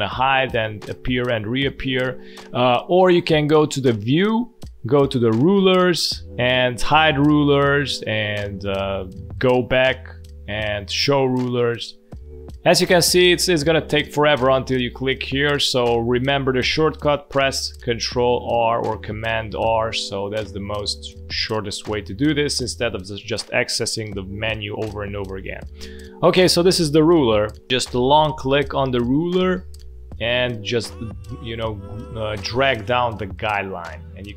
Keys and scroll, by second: 0.0 ctrl+r, 0.8 ctrl+r, 1.3 ctrl+r, 17.9 ctrl+r, 18.4 ctrl+r, 18.7 ctrl+r, 18.9 ctrl+r, 19.0 ctrl+r, 19.3 ctrl+r, 20.0 ctrl+r, 20.4 ctrl+r, 22.5 ctrl+r, 27.4 ctrl+r.